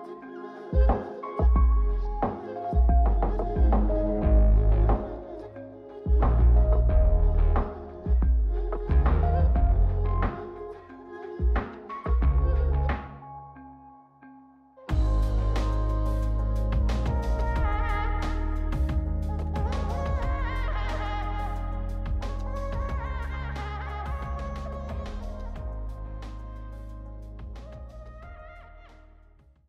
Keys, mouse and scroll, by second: 1.5-1.8 ctrl+drag, 2.7 g, 5.5 click, 6.3 a, 8.2 click, 9.0 l, 10.0 alt+s, 14.9 click, 16.1 l, 18.2 l, 19.2 x, 21.1 click, 22.5-23.1 scroll up 2, 23.1-24.6 drag, 26.3 click, 26.8 m, 27.4 m, 28.1 m, 28.6 m.